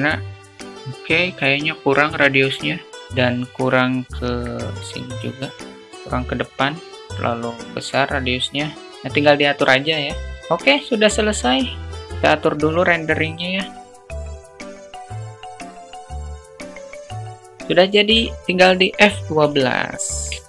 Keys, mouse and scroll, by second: 0.2 click, 2.9-3.8 alt+middle drag, 5.0-6.3 drag, 7.0-7.8 drag, 8.2 click, 10.4 click, 11.4-11.8 drag, 13.1 click, 13.9 click, 14.2 drag, 14.7-15.0 drag, 15.2 click, 15.8 click, 16.2 click, 16.5 click.